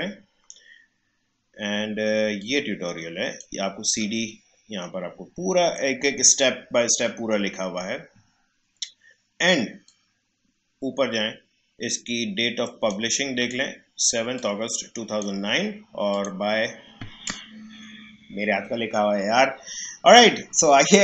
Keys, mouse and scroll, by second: 2.3-4.7 drag, 4.7 scroll down 1, 9.8-16.1 drag, 19.7 scroll down 1.